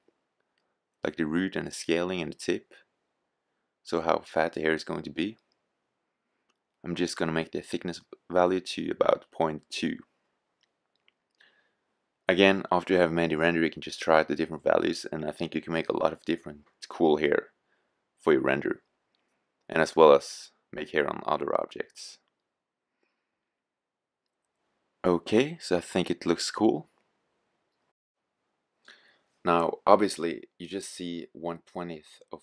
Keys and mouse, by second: 3.2-5.1 drag, 32.1-32.4 drag.